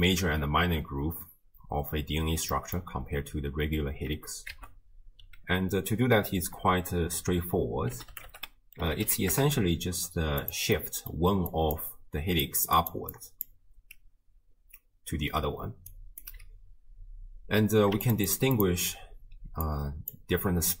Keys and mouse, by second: 2.5 middle click, 4.5 ctrl+a, 10.8 middle click, 11.5 click, 12.3 d, 12.5 click, 12.8-13.8 d, 12.9 click, 13.1 click, 15.7 d, 15.9 click, 16.3 d, 18.0 ctrl+shift+d, 18.1 ctrl+shift+click, 18.3 ctrl+shift+click, 18.6 ctrl+shift+click, 19.5-20.8 d, 19.7 click.